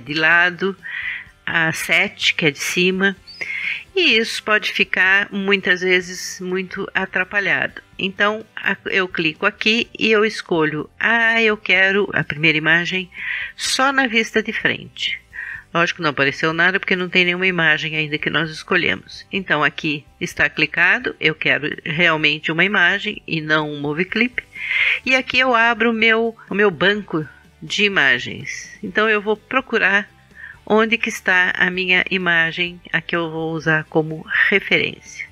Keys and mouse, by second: 9.8-11.7 drag, 11.7-13.6 middle drag, 26.1 click.